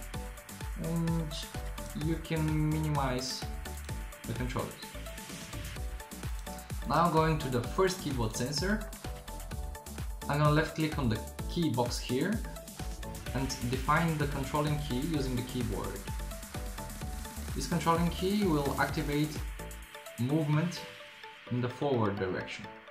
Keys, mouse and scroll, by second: 18.4-19.1 middle drag.